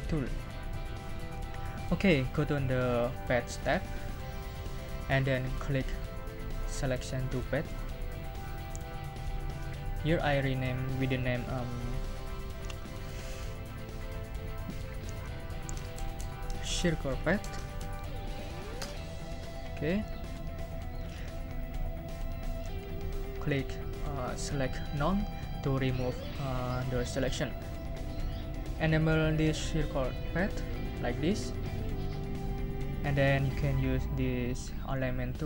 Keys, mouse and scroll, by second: 4.1 click, 8.6 click, 10.2 click, 15.5-18.5 typing, 18.7 Return, 24.2 click, 30.7 click.